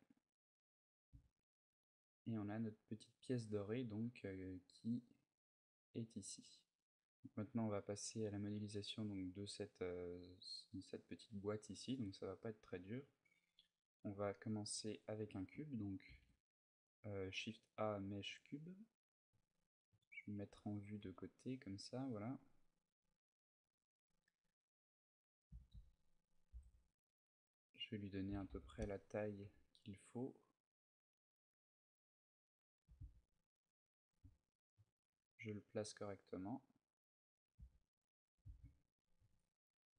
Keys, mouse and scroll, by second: 0.7-1.4 scroll down 3, 0.9 a, 1.4-1.9 scroll down 1, 2.7 scroll down 3, 3.2-3.7 scroll up 1, 4.7 scroll up 8, 11.6 click, 12.2 middle click, 12.8-13.2 scroll down 1, 13.6 scroll down 6, 15.9 shift+a, 18.6 middle click, 19.6 KP_3, 20.8 g, 21.6 click, 21.7 click, 22.1 g, 22.7 click, 23.3 s, 25.1 click, 25.4 s, 27.4 click, 28.1 s, 29.1 click, 29.2 g, 31.0 click, 32.6 g, 33.9 click, 34.5 KP_7, 34.9 z, 37.6 click, 38.1 g, 38.8 shift+click.